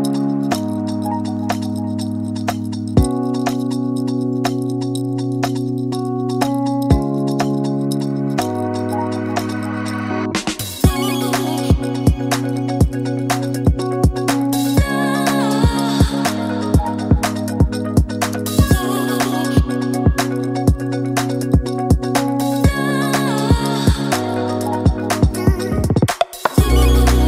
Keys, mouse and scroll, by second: 3.1 ctrl+middle click, 4.8 Page_Down, 6.2 ctrl+middle click, 7.5 shift+middle click, 8.6 click, 9.0 s, 12.8 click, 14.5 click, 17.6 click, 19.2 click, 20.5 shift+middle click, 23.7 click, 24.8 click, 25.4 click, 25.8 click, 26.1 click.